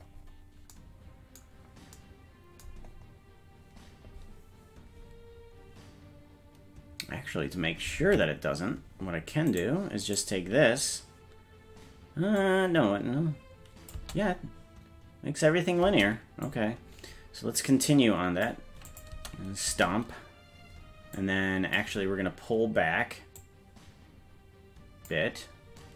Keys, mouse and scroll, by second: 0.5 scroll down 1, 1.5-2.0 scroll down 12, 3.7 scroll up 1, 4.6-5.5 scroll up 3, 5.5-6.4 scroll up 2, 6.4-7.0 scroll up 3, 8.0 ctrl+Tab, 10.1 right click, 12.4-14.1 drag, 14.0 space, 15.9 space, 16.5-18.5 drag, 18.9 click, 19.1 space, 19.7 space, 21.2 click, 23.5-25.1 drag.